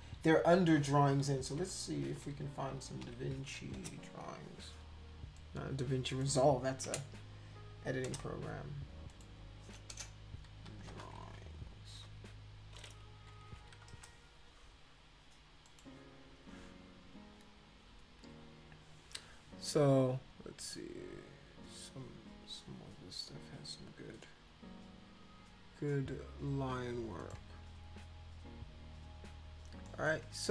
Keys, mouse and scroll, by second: 1.2-4.0 typing, 5.4 click, 6.9 BackSpace, 8.1 Return, 9.1 click, 9.9-12.0 typing, 13.3 Down, 13.5 Down, 13.9 Return, 15.7 click, 27.2 click, 29.9 middle click.